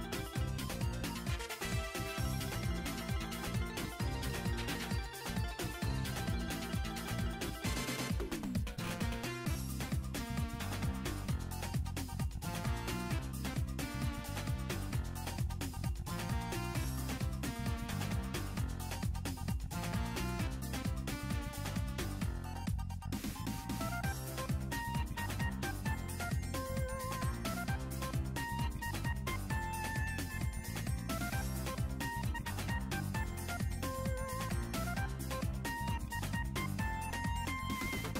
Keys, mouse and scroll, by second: 2.7 scroll down 2, 2.9 middle click, 3.7 r, 7.7 click, 8.0 r, 9.9 click, 10.2 r, 11.0-11.7 scroll down 4, 11.2 middle click, 12.6 click, 15.1 click, 18.5 click, 20.4 click, 22.5 click, 23.2 click, 24.4 click, 27.1 r, 31.2 click, 31.4 r, 32.5 middle click, 32.6 scroll down 1, 33.3 scroll up 1, 34.9 click, 35.0-35.6 middle drag, 35.5-36.1 scroll up 3, 36.1 middle click, 36.1 scroll down 1, 36.2-36.7 scroll down 2, 36.9 click.